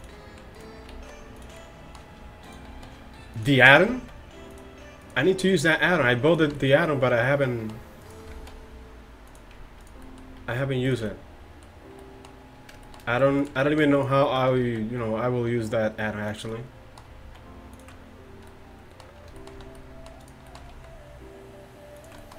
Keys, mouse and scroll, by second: 1.0 alt+s, 2.8 alt+s, 4.0 alt+s, 5.9 alt+s, 8.4 alt+s, 10.1 click, 10.4 alt+s, 13.4-14.7 middle drag, 14.7 alt+s, 16.6 middle click, 17.3 alt+s, 20.8 alt+s.